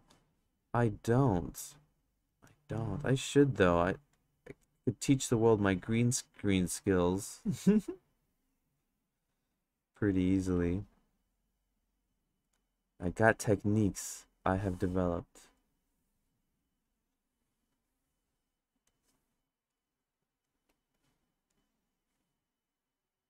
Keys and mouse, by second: 0.9 click, 2.3 ctrl+z, 2.7 click, 3.6 click, 4.5 ctrl+z, 4.8 click, 5.7-7.2 drag, 8.4 click, 9.6 click, 10.2 ctrl+z, 10.5-12.3 drag, 13.0 click, 15.6 click, 17.0 click, 19.7 click, 20.7 ctrl+z, 21.5 click.